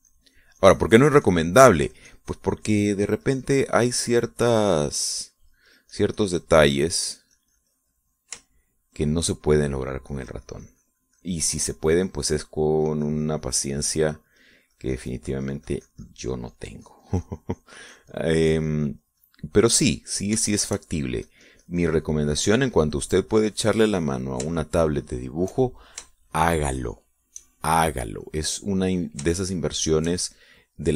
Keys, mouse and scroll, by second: 10.2 shift+middle click, 11.6-21.9 drag, 22.1 shift+middle click, 22.9-23.9 drag, 24.1-26.1 drag, 26.3 shift+middle click, 26.8 shift+middle click, 27.9 shift+middle click, 28.6 shift+middle click, 29.9 middle click.